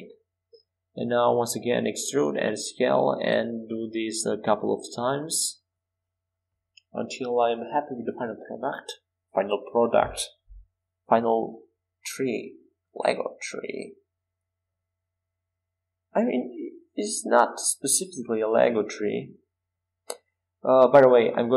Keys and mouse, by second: 0.0 e, 0.7 s, 4.4 e, 9.1 e, 9.6 s, 13.7 e, 16.4 s, 18.9 e, 19.5 s.